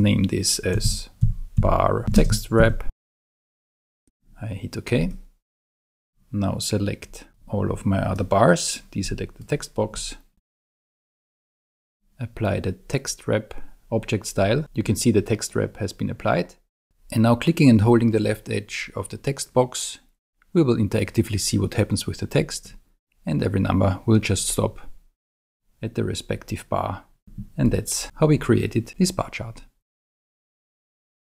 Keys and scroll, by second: 0.6-4.2 typing.